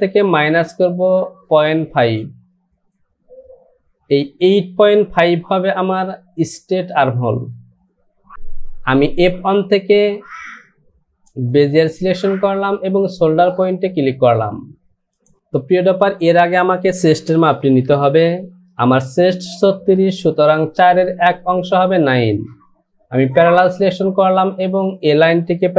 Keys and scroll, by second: 17.6 ctrl+z.